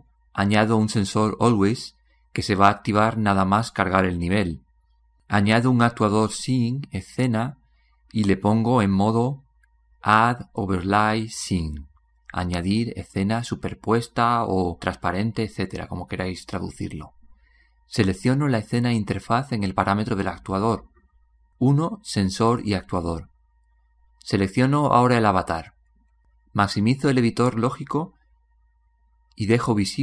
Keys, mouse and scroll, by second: 25.7-30.0 drag.